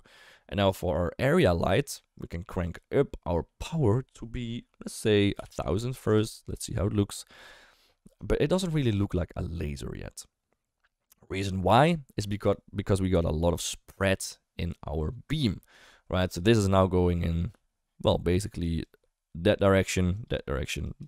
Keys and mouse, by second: 2.6 click, 3.7-6.1 drag, 5.6 0, 5.8 0, 8.4 shift+middle drag, 18.0-21.0 d, 18.6 click, 20.1 click, 20.8 click.